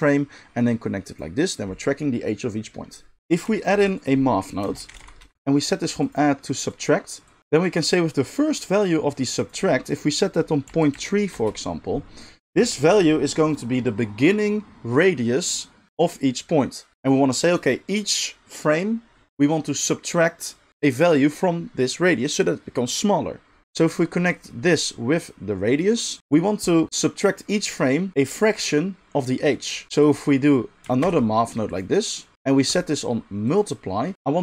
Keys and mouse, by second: 0.6-30.1 drag, 3.7 shift+a, 30.1-32.6 middle drag, 31.0 shift+d, 32.6-34.4 drag.